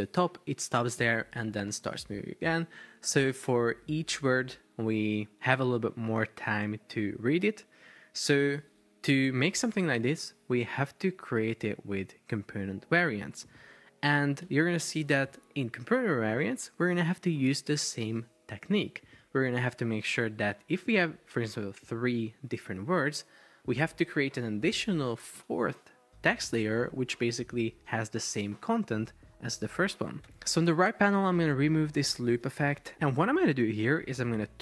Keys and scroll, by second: 8.8 super+Tab, 14.5 Escape.